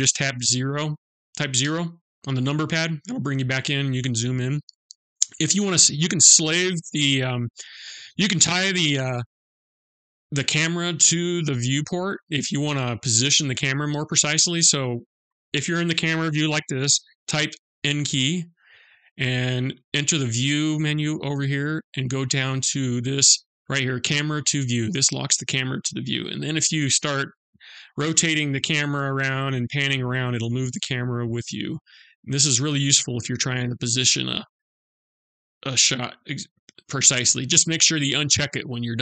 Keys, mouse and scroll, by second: 1.0 KP_0, 3.2-4.1 scroll up 4, 4.4 scroll down 1, 18.9 click, 24.1 click, 25.4-26.2 scroll down 2, 26.2 middle click, 27.3 shift+middle click, 28.3 middle click, 29.7 shift+middle click, 30.7 middle click, 32.6 shift+middle click, 33.6 shift+scroll down 1, 34.1-34.7 scroll up 1, 34.7-35.2 scroll up 1, 35.3 shift+middle click.